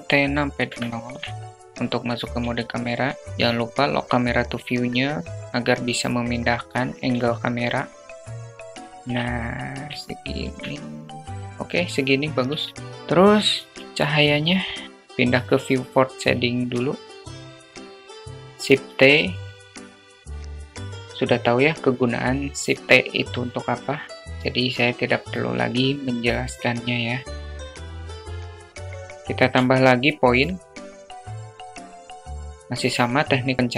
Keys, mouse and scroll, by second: 1.0 q, 5.9-7.2 shift+drag, 8.2 shift+click, 8.4 middle click, 8.8 alt+shift+click, 11.5 q, 13.0 shift+a, 16.0 click, 17.3 click, 17.5 g, 18.2 shift+t, 19.8 click, 20.2 click, 24.4 shift+a, 27.8 alt+middle drag, 28.0 click, 28.8 alt+shift+middle click, 29.0 alt+middle click, 29.2-30.3 drag, 30.0 alt+shift+middle click, 31.1 click, 31.6 alt+middle click, 31.9 click, 32.4 KP_0.